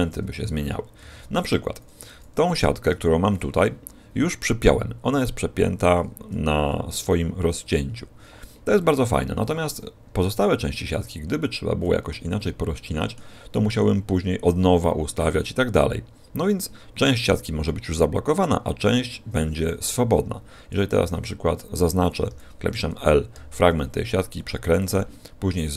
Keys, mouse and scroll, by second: 0.0 s, 2.8 a, 10.0 a, 11.3 middle click, 12.3 middle click, 13.4 middle click, 22.2 l, 23.2 r, 24.8 click, 25.4 a, 25.6 a.